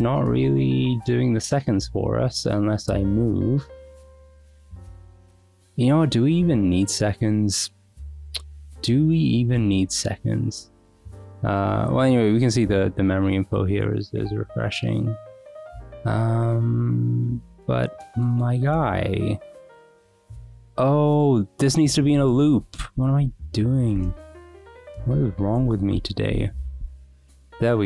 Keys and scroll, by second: 22.1-25.0 typing, 24.4 Escape, 24.8 Escape, 25.5 Return, 26.3 Escape, 26.8 Return.